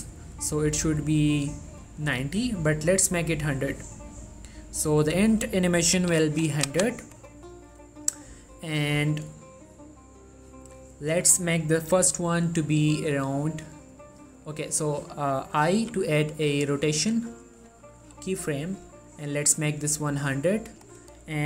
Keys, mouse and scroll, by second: 5.3 click, 17.7-21.4 drag.